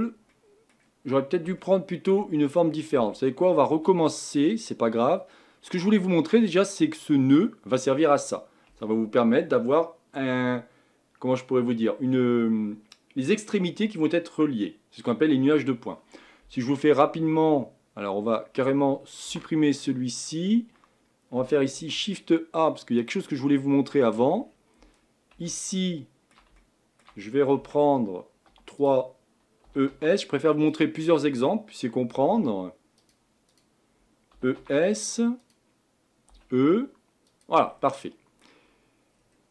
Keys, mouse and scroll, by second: 0.0-0.3 scroll down 1, 0.3-3.0 middle drag, 3.0 Tab, 4.0-19.3 middle drag, 19.3 Delete, 23.1 shift+a, 23.7-24.4 middle drag, 24.4-25.0 scroll up 6, 25.5-27.6 middle drag, 27.6 Tab, 28.5 3, 28.9 click, 29.6 e, 31.0-32.2 middle drag, 32.2 e, 33.6 click, 34.3 e, 36.3 e, 37.7 scroll down 5, 38.1 middle click, 38.7-39.1 scroll up 1, 39.1-39.5 scroll down 1.